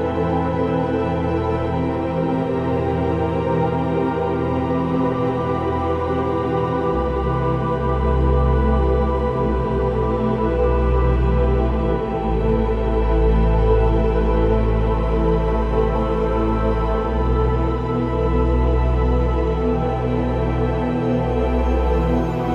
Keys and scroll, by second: 1.0 ctrl+t, 3.2 v, 3.8 ctrl+v, 3.9 ctrl+o, 4.5 ctrl+o, 4.6 ctrl+a, 4.7 ctrl+c, 5.1 ctrl+v, 6.0 ctrl+t, 8.2 ctrl+i, 8.4 b, 10.1 typing, 11.5-13.8 typing.